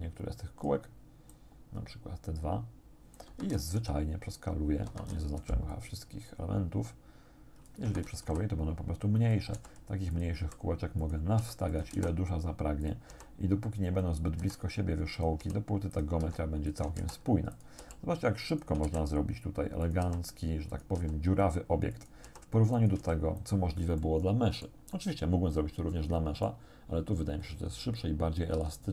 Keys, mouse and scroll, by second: 1.3-3.4 drag, 3.3 Escape, 3.8 s, 4.9 Escape, 5.4 c, 5.7-7.9 drag, 7.9 Escape, 8.3 s, 9.2 click, 9.6 g, 10.1 click, 10.5 r, 11.1 click, 11.4 g, 11.7 shift+click, 11.9 shift+d, 12.9 click, 13.1 r, 13.9 click, 14.4-17.8 typing, 15.2 click, 15.9 click, 16.7 shift+click, 17.6 shift+click, 18.5 shift+click, 18.9 shift+d, 19.9 click, 20.1 r, 20.7 click, 21.0 g, 22.0 click, 22.3 r, 22.8 click, 23.0 g, 23.4 click, 24.0 click, 25.0-26.7 drag, 26.8 scroll down 1, 27.3-27.7 scroll up 1, 28.6 s.